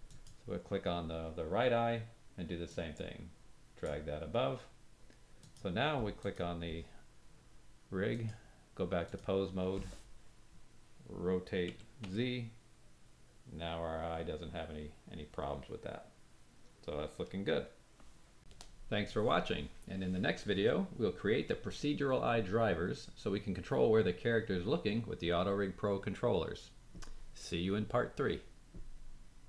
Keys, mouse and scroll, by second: 0.0 click, 2.6-3.8 drag, 5.3 click, 6.1 click, 8.1-18.1 drag, 11.7 r, 19.0 click.